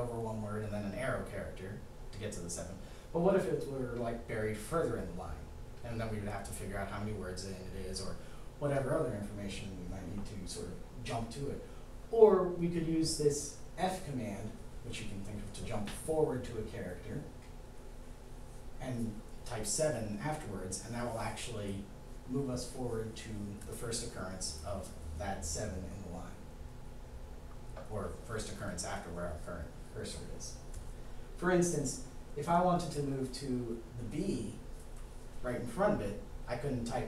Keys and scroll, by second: 14.2 f, 17.7 7.